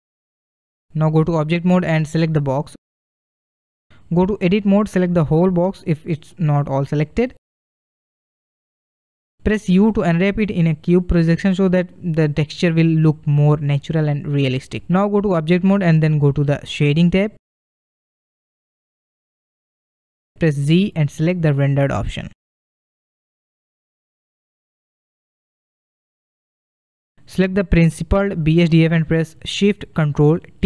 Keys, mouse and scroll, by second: 1.1-2.9 drag, 4.4-6.7 drag, 6.7 a, 6.8 a, 9.4 u, 15.2 click, 17.2 click, 18.8-20.0 scroll up 4, 20.1 shift+middle click, 20.4-21.0 shift+scroll, 22.5 z, 24.1-25.8 middle drag, 25.8-26.3 scroll up 2, 26.3-28.4 shift+middle drag, 28.4-29.2 click.